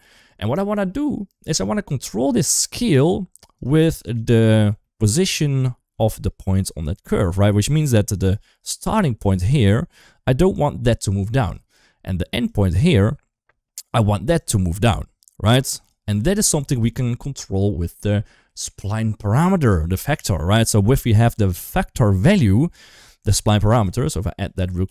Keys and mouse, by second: 0.7 shift+middle click, 2.6 shift+click, 3.7 ctrl+z, 4.1 shift+middle drag, 4.6 shift+middle drag, 5.8 shift+middle click, 7.8 shift+middle drag, 8.5 shift+middle click, 8.8-12.2 d, 9.0-11.3 drag, 12.2-13.6 drag, 13.6 d, 14.0 d, 14.2-15.7 drag, 16.0 d, 16.4 shift+middle drag, 18.3 shift+middle click, 23.4 click, 23.7 shift+a.